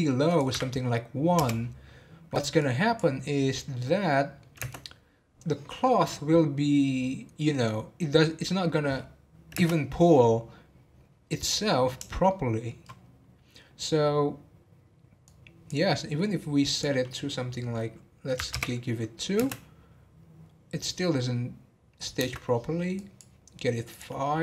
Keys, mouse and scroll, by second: 0.2-3.6 drag, 3.6-3.9 middle drag, 3.9 scroll down 1, 4.2 middle click, 4.6 space, 10.1 scroll down 3, 12.2-15.3 shift+middle drag, 15.3-19.4 drag, 19.4 space, 22.3 space, 23.0-24.4 drag.